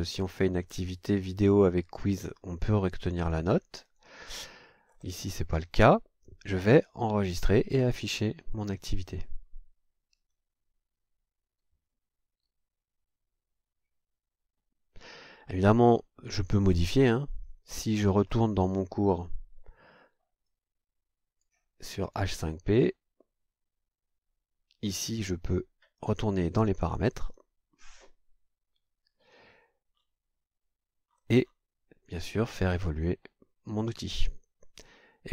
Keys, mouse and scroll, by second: 3.9 click, 4.9-5.2 scroll down 2, 7.9 click, 15.3-15.7 scroll down 2, 16.7-17.3 scroll down 4, 17.7-18.5 scroll up 5, 19.6 scroll up 2, 20.5 click, 22.0 click, 26.0 click, 27.2 click, 29.9-35.3 scroll down 3.